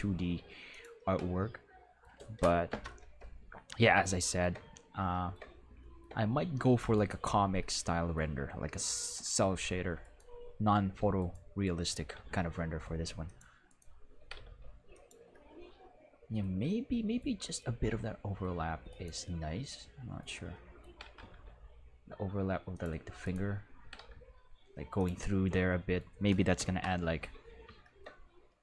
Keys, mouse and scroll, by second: 0.7 click, 2.7 Home, 4.1-4.4 shift+middle drag, 7.9 middle drag, 11.9 r, 12.1 x, 14.2 r, 14.3 x, 14.5 x, 15.6 middle drag, 17.0-18.1 middle drag, 20.1 middle click, 20.9 r, 21.2 x, 21.3 x, 22.7 click, 23.2 right click, 23.8 r, 24.0 x, 24.9 click, 25.7 middle drag, 25.9 middle click, 26.6 Home.